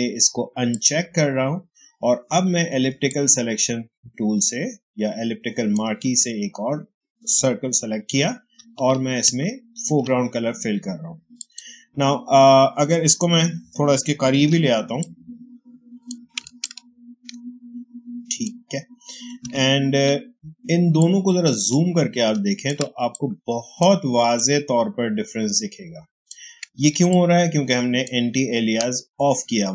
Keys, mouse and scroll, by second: 0.6 ctrl+click, 8.9 ctrl+shift+click, 9.7 ctrl+alt+BackSpace, 11.3 ctrl+click, 14.3 ctrl+m, 14.9-19.3 ctrl+drag, 19.3 ctrl+d, 19.9 ctrl+space, 20.9 ctrl+click, 21.0 ctrl+space, 23.0 click, 23.3 space, 24.3 click, 24.3 space, 27.0-29.7 ctrl+drag.